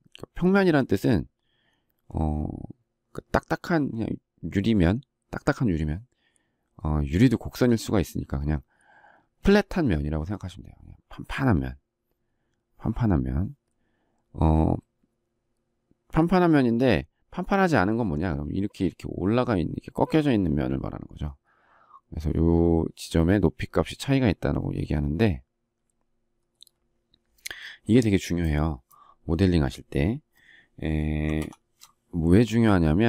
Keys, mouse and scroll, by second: 31.3 ctrl+shift+7.